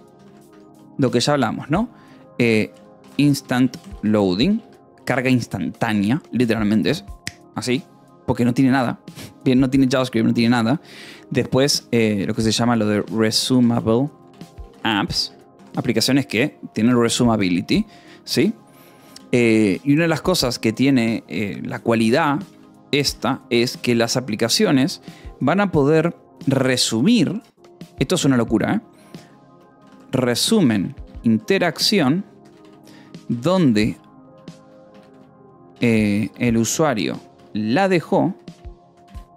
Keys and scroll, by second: 0.0-1.1 typing, 2.1-5.8 typing, 9.9 space, 12.2-14.7 typing, 15.2 Escape, 16.0 ctrl+s, 18.0 o, 19.1 :, 19.3 space, 20.1 Escape, 20.5 k, 22.0-23.1 typing, 27.2 space, 29.5-39.3 typing.